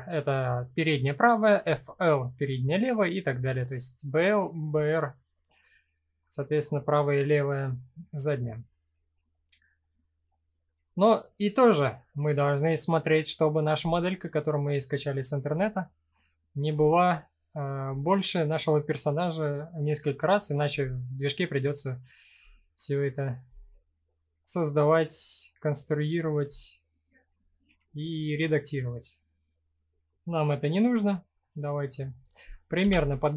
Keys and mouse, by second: 1.2 click, 4.8-6.8 middle drag, 10.8 click, 11.2-12.1 middle drag, 13.5-14.0 middle drag, 14.5 click, 15.7-16.2 middle drag, 16.8-17.3 shift+drag, 17.7-18.6 middle drag, 19.0 middle click, 23.0 s, 25.8 click, 26.1-26.9 middle drag, 28.0 shift+middle drag, 28.4-29.7 middle drag, 30.4 s, 31.8 click, 32.4 KP_1.